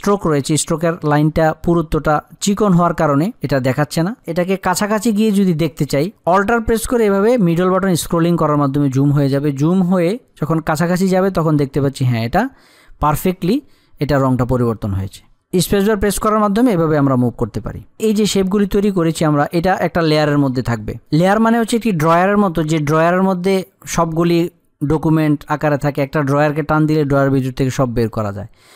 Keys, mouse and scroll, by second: 5.5 click, 7.2 alt+scroll up 1, 14.5 alt+scroll down 1, 15.0 space, 17.6 click.